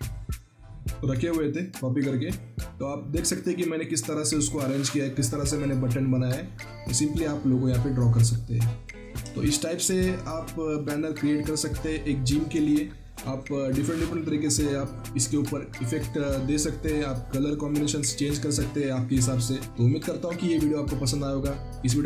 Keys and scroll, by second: 9.2 ctrl+z.